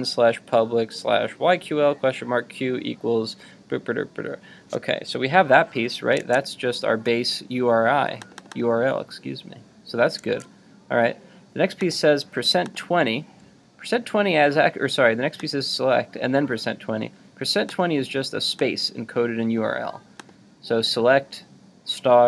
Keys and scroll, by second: 10.2 super+Tab.